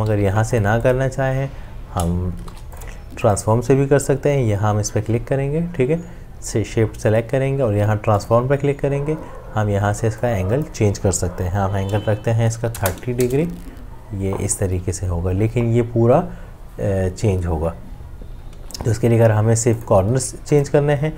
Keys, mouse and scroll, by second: 1.0 v, 2.5 ctrl+shift+g, 12.6 typing, 13.2 Return, 18.5 ctrl+z.